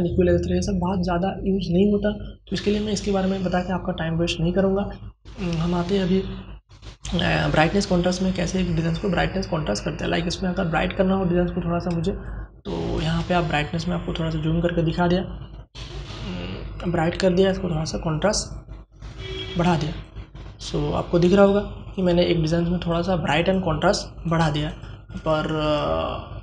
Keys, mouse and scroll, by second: 9.3 click, 11.3 space, 11.5-14.4 drag, 14.4-20.6 drag.